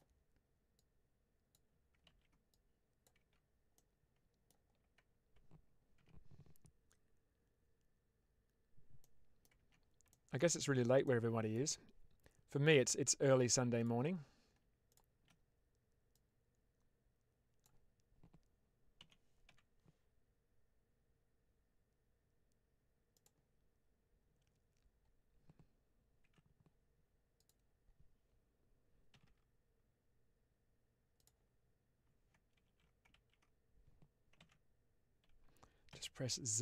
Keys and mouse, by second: 0.6 click, 2.1 ctrl+z, 2.5 click, 3.1 Tab, 3.6 middle click, 5.9 Tab, 9.0 middle click, 9.4 Tab, 10.0 shift+middle click, 10.6 Tab, 11.0 middle click, 16.0-17.5 drag, 18.9 s, 19.3 y, 23.0 click, 26.1 1, 27.2 click, 29.0 g, 29.1 g, 31.0 click, 32.5 z, 35.8 z.